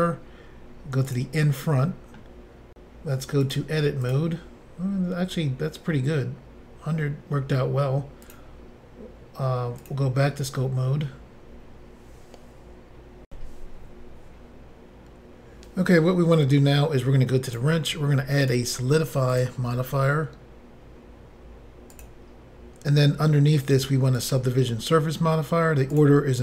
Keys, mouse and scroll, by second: 1.1 click, 1.9 middle click, 3.4 click, 4.0 click, 5.3 click, 8.2 click, 8.3 click, 9.8 click, 13.3 Insert, 17.5 click, 17.5 click, 18.4 click, 18.5 click, 19.3 click, 19.4 click, 21.9 click, 22.0 click, 24.2 click, 24.3 click, 25.9 click, 26.0 click.